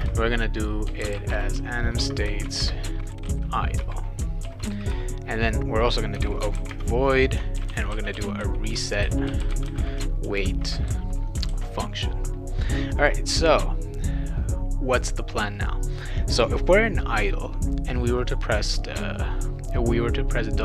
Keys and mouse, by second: 0.0-3.9 typing, 2.5 shift+Return, 4.4 ctrl+s, 5.9-11.3 typing, 11.5 ctrl+s, 13.0 click.